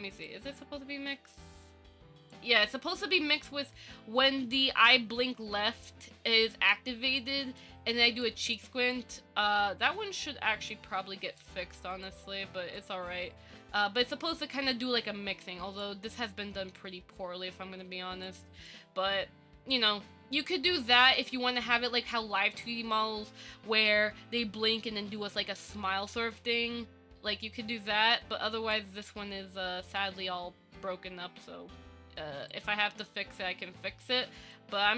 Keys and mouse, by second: 0.5-2.5 drag, 7.4 click, 8.4 click, 9.3-11.6 drag, 13.0-16.0 drag, 18.4 click, 19.9-22.8 drag, 24.0-29.0 drag, 30.2 shift+middle click, 32.7 middle click, 34.7 middle click.